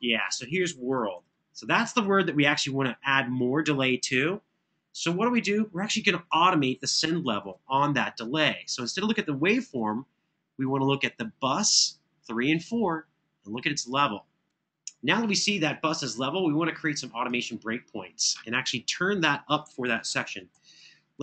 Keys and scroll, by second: 0.9 super+[, 2.2 super+[, 19.9 super+], 20.3 super+].